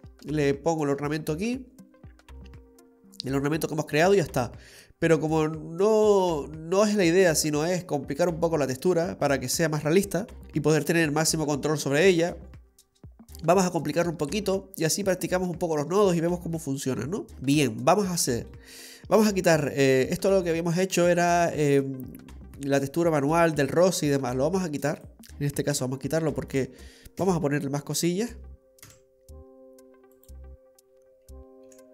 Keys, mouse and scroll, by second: 12.0-12.6 scroll up 1, 12.6-13.1 scroll down 1, 13.1-14.1 scroll down 1, 14.1 middle click, 14.1-15.0 scroll down 3, 16.1-17.3 scroll up 9, 17.3 middle click, 18.1 middle click, 19.8 click, 25.1 click, 25.8 Delete, 26.5 click, 27.2 Delete, 27.9 click, 28.8 Delete, 31.2 click, 31.7 Delete.